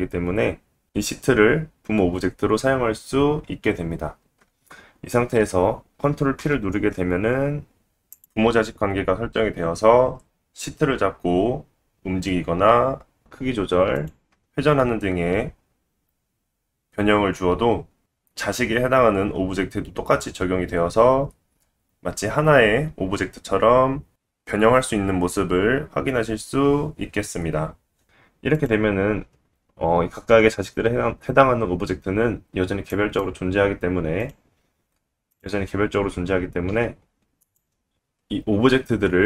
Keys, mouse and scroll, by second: 3.6 shift+click, 4.2 shift+click, 6.0 ctrl+middle click, 6.4 ctrl+p, 9.4-10.2 middle drag, 10.2 click, 10.3-11.0 middle drag, 11.0 g, 12.4 ctrl+z, 12.4-12.8 scroll down 1, 12.8 s, 13.7-18.1 middle drag, 14.7 ctrl+z, 15.1 r, 17.0 ctrl+z, 18.4-28.0 middle drag, 28.0 click, 28.0 s, 28.3 Tab, 28.6-29.1 scroll up 1, 29.1-34.0 drag, 31.1 alt+z, 34.8 alt+middle click, 35.2 alt+click, 35.5-38.3 middle drag, 35.7 s, 38.5 r.